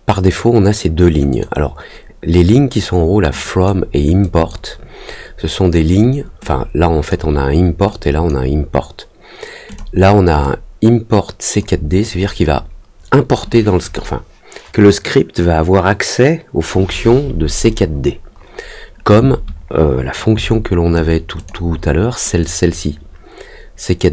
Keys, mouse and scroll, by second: 1.2 click, 3.4 click, 4.2 click, 6.4 click, 7.8 click, 9.6 click, 10.4-11.5 drag, 21.3 click, 22.4-24.1 drag.